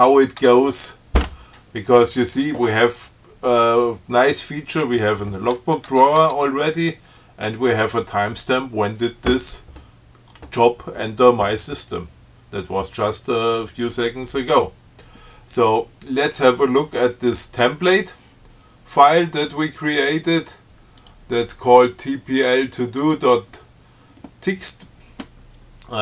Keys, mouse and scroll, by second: 0.4 click, 0.6 Tab, 6.1 Tab, 21.2 click, 23.2 click.